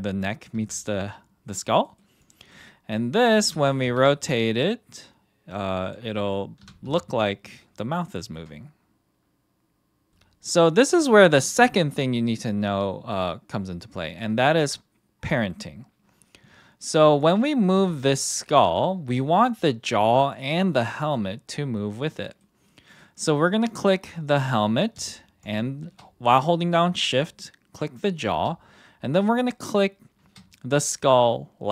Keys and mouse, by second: 0.5 r, 1.8 middle click, 2.5 middle click, 2.9 middle click, 3.4 r, 3.8 x, 5.8 drag, 6.1 middle drag, 6.6 r, 7.6 x, 10.0 KP_1, 14.1 click, 17.1 click, 17.7 g, 18.6-19.5 right drag, 19.5 click, 21.5 middle drag, 22.2 middle click, 23.0 middle drag, 23.7 click, 25.4 shift+click, 29.3 shift+click.